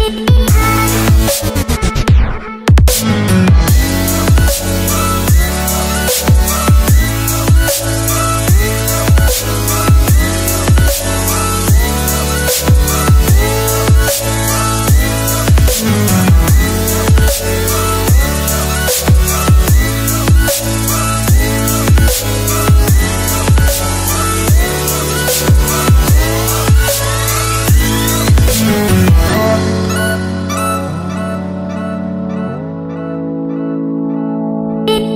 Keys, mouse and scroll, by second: 5.0 t, 5.5 click, 8.4 \, 8.9 Return, 10.6 click, 13.4 Delete, 14.4 click, 21.9 ctrl+click, 23.8 Return, 27.7 click, 28.0 scroll down 1, 28.6 click, 28.9 scroll down 1, 30.1 click, 31.9 scroll up 1.